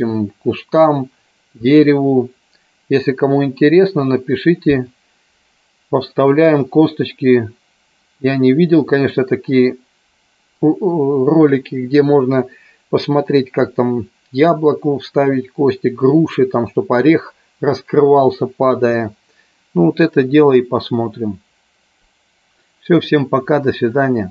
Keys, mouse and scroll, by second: 6.3 click.